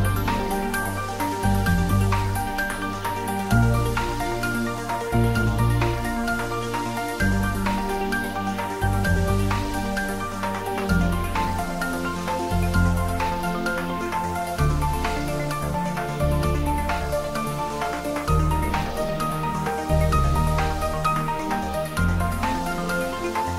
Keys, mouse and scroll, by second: 0.3 g, 6.7 click, 7.1 shift+z, 8.0-8.7 click, 9.1-9.6 scroll down 1, 11.8-13.2 scroll down 1, 13.3 ctrl+z, 14.7 shift+z, 15.6-16.9 drag, 17.9-18.9 click, 18.3-20.5 drag.